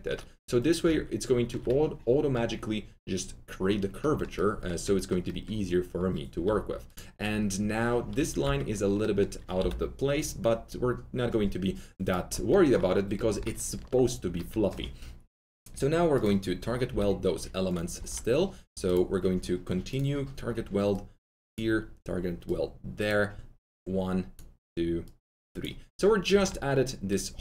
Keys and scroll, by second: 6.4 2, 8.3 alt+t, 8.4 alt+z, 9.5 s, 16.8 s, 17.9 1, 26.2 1.